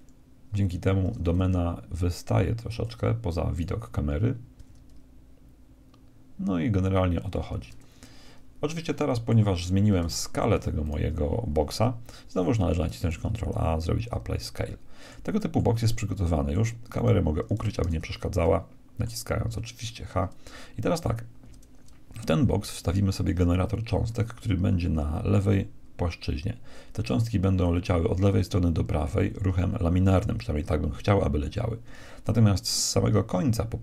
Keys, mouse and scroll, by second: 1.0 s, 3.5-5.2 right drag, 4.6 g, 5.4 right click, 8.7-10.8 middle drag, 10.8-12.8 right drag, 13.1 ctrl+a, 14.6-16.9 middle drag, 16.9 click, 16.9-18.8 right drag, 17.8 h, 18.4-20.9 middle drag, 20.9-22.8 right drag.